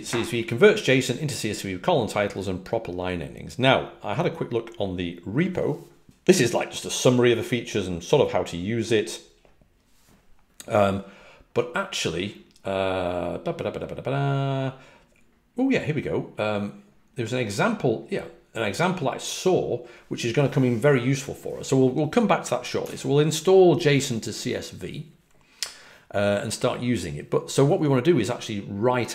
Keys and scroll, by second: 22.7 super+w.